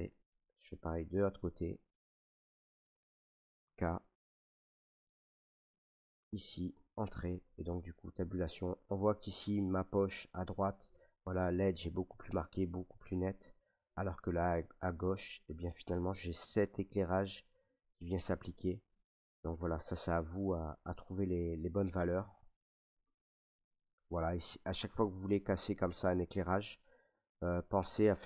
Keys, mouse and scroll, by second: 0.9 middle click, 0.9-1.4 scroll, 1.9 shift+middle click, 2.2 scroll, 3.6 k, 4.4 shift+middle click, 5.0 click, 6.1 click, 6.7 Return, 7.0 middle click, 7.0 middle click, 7.0 middle click, 7.1 middle click, 7.1 middle click, 7.6 Tab, 8.8 middle click, 9.7 middle click, 10.0 scroll, 12.3 middle click, 13.2-21.1 middle drag, 21.8 middle click, 23.0 Tab, 24.4 Tab, 26.4 middle click, 27.1 Tab.